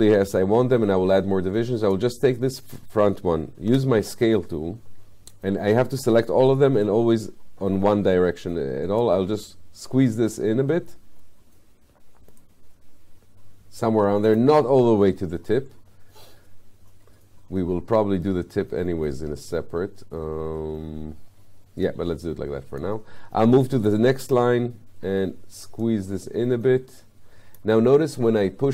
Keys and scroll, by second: 3.7 r.